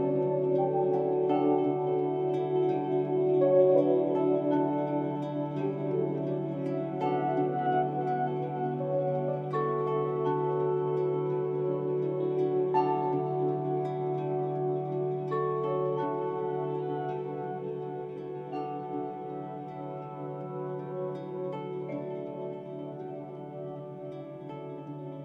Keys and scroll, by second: 0.9 ctrl+i, 2.1 ctrl+s, 2.9 ctrl+g, 3.5 ctrl+i, 5.5 ctrl+z, 8.6 ctrl+s, 9.1 ctrl+i, 11.2 ctrl+s, 13.0 ctrl+z, 14.5 ctrl+Return, 14.6 ctrl+j, 15.2 ctrl+t, 17.1 ctrl+z, 18.6 ctrl+s, 20.0 ctrl+d, 20.7 ctrl+z, 22.2 ctrl+d, 23.4 ctrl+Return, 23.5 ctrl+j, 24.1 ctrl+t, 24.5 ctrl+j, 24.9 ctrl+s.